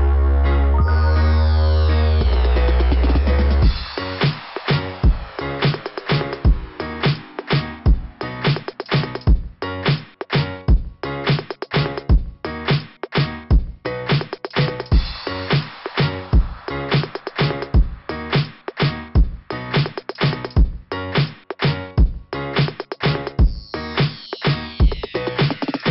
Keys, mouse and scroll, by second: 0.6 click, 0.8 click, 0.9 click, 1.1 click, 1.2 click, 1.4 click, 1.5 click, 1.7 click, 1.9 click, 2.0 click, 2.1 click, 2.3 click, 15.1 click, 16.0 click, 16.1 click, 16.2 click, 16.3 click, 16.5 click, 16.6 click, 16.8 click, 16.9 click, 17.2 click, 17.5 click, 21.6 click, 21.6 click, 21.9 click, 22.0 click, 22.2 click, 22.3 click, 22.5 click, 22.6 click, 22.9 click, 22.9 click, 23.2 click, 23.3 click.